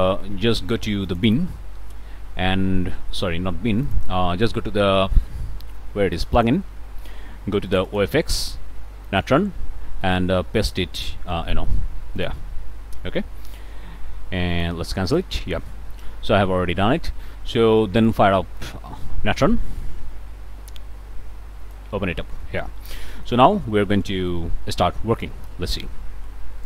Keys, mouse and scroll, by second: 1.0 click, 3.9 click, 6.2 click, 7.7 click, 9.1 click, 10.0 click, 12.2 click, 14.5 click, 15.1 click, 18.0 click, 18.6-19.6 drag, 21.6 click, 22.8 click, 23.9 click.